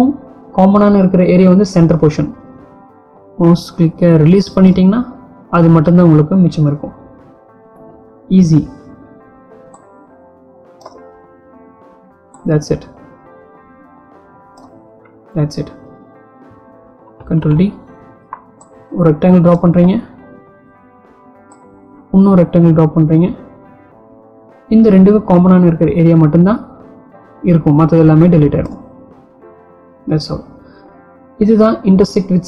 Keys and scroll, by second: 17.0 ctrl+d.